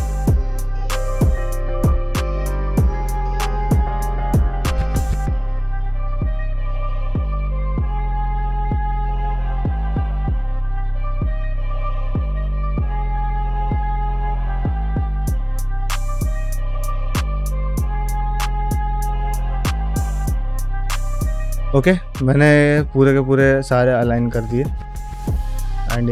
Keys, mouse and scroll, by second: 0.0-6.4 typing, 0.1 shift+middle click, 0.6 click, 1.1 shift+middle click, 1.2 click, 1.6 ctrl+middle click, 1.8 click, 2.1 click, 2.4 middle click, 2.6 middle click, 2.7 click, 3.0 middle click, 3.1 middle click, 3.4 click, 3.6 shift+middle click, 4.0 shift+middle click, 4.3 click, 4.6 shift+middle click, 5.0 ctrl+middle click, 5.1 click, 5.3 click, 5.9 middle click, 6.0 click, 6.2 middle click, 6.7 click, 6.9 shift+middle click, 7.2 click, 7.5-11.6 typing, 7.8 click, 8.0 middle click, 8.4 click, 8.8 middle click, 9.1 ctrl+click, 9.4 shift+middle click, 9.5 click, 9.9 click, 10.1 shift+middle click, 10.8 middle click, 11.1 alt+z, 11.1 shift+middle click, 11.3 click, 11.5 shift+middle click, 11.8 click, 12.1 alt+z, 12.2 alt+z, 12.3-13.4 drag, 13.5 click, 13.5-19.2 typing, 13.8 middle click, 13.9 middle click, 14.0 middle click, 14.2 click, 14.6 middle click, 14.9 middle click, 15.0 click, 15.2 click, 15.5 click, 15.7 middle click, 15.8 shift+middle click, 15.9 click, 16.3 ctrl+alt+middle click, 16.5 middle click, 16.7 click, 17.4 click, 17.7 click, 17.8 ctrl+middle click, 18.3 click, 18.8 click, 19.0 middle click, 19.1 ctrl+Tab, 19.2 shift+middle click, 19.3 shift+click, 19.7 shift+middle click, 19.8 shift+click, 20.1 shift+middle click, 20.2 shift+click, 20.4 Tab, 20.4 g, 20.6 shift+click, 20.7 g, 20.9 ctrl+middle click, 21.1 ctrl+shift+middle click, 21.3 ctrl+middle click, 21.8 middle click, 22.7 ctrl+middle click, 23.2 shift+middle click, 23.5 ctrl+middle click, 23.8-25.5 middle drag, 25.7 ctrl+middle click, 26.0 shift+middle click.